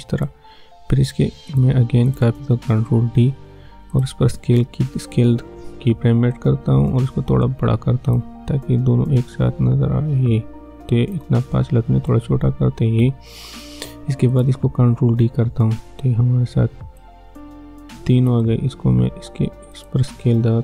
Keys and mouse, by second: 2.8 ctrl+d, 3.9 click, 4.3 s, 6.3-14.3 drag, 14.9 ctrl+d, 17.0-19.8 drag, 20.3 s.